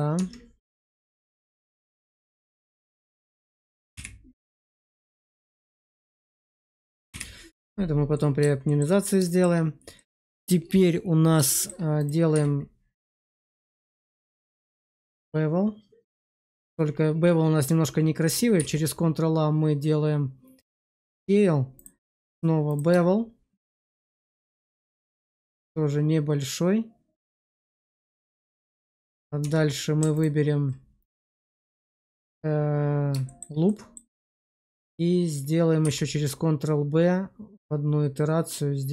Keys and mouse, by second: 0.1 Tab, 0.7 shift+middle click, 1.5 middle click, 2.3 shift+middle click, 2.9 middle click, 3.8 /, 4.7-6.4 middle drag, 7.0 /, 8.0 middle click, 8.6 shift+middle click, 9.2 shift+middle click, 9.9 middle click, 10.3 shift+middle click, 11.4 shift+middle click, 12.2 q, 16.3 shift+click, 18.5 ctrl+a, 20.9 shift+middle click, 21.9 q, 27.4 shift+click, 27.9 shift+middle click, 28.3 middle click, 29.3 Tab, 30.0 alt+click, 31.2 shift+click, 31.4 shift+click, 32.0 shift+middle click, 33.2 shift+middle click, 33.6 click, 35.7 ctrl+b.